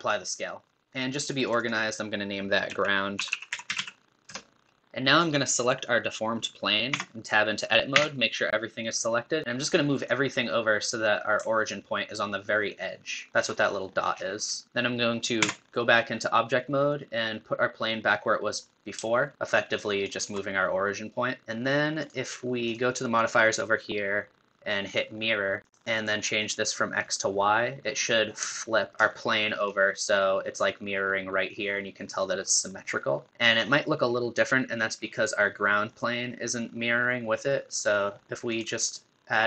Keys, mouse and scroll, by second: 1.4-4.7 drag, 7.1 Tab, 7.9 a, 9.4-13.2 drag, 13.3 shift+middle click, 14.1-14.6 scroll down 6, 14.7 scroll up 1, 15.6 Tab, 16.9 click, 22.0 click, 22.7 click, 25.3 click, 27.3 click, 28.4-28.9 shift+middle drag, 28.9 scroll up 8, 29.1-32.1 shift+middle drag, 33.7-35.9 middle drag, 35.9 click.